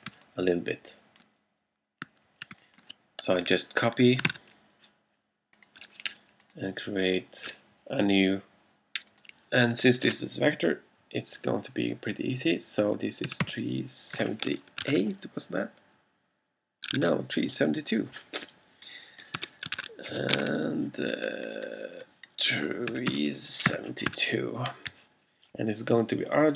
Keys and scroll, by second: 0.2 space, 2.6 alt+space, 3.6 space, 4.5 super+c, 13.1-14.8 typing, 14.9 super+8, 15.0 super+Tab, 17.0 super+Tab, 19.4 2, 19.9 super+Tab, 22.7-24.2 typing.